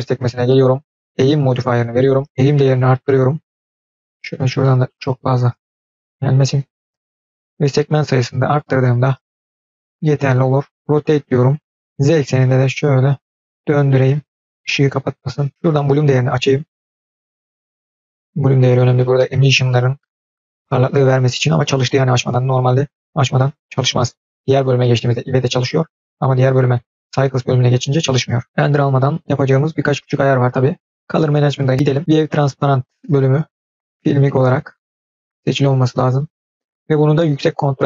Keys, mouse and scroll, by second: 0.2-1.5 drag, 2.3-3.8 drag, 4.0-5.0 middle drag, 5.0-6.4 drag, 7.4-9.3 drag, 9.6 scroll down 1, 11.0 r, 14.5-15.5 middle drag, 14.5-15.1 scroll down 2, 16.0 click, 26.5-27.8 drag, 31.1 click, 31.4-32.3 scroll down 4, 33.6 click, 36.0-37.8 drag.